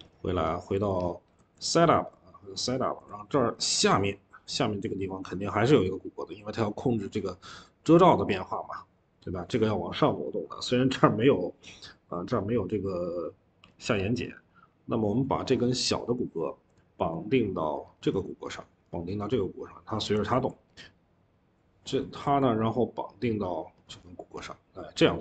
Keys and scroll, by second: 1.2 ctrl+z, 18.5 Escape, 18.7 Escape, 20.2 ctrl+z, 23.6 Escape, 23.8 Escape.